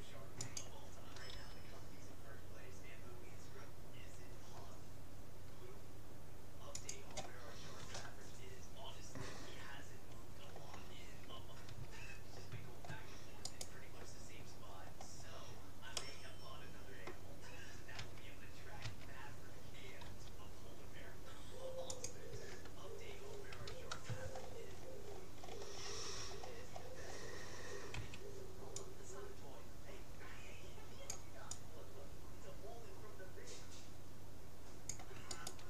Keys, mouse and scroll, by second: 1.4 g, 10.0-11.4 middle drag, 11.7 a, 12.8 middle click, 13.6-15.4 right drag, 14.4 middle click, 15.0-17.4 middle drag, 17.4 click, 18.0 a, 18.8 a, 20.2 g, 22.0 g, 22.4 a, 23.2 middle click, 23.6 a, 24.4-25.2 scroll down 1, 25.2-26.6 scroll up 1, 26.6-29.0 middle drag, 28.0 c.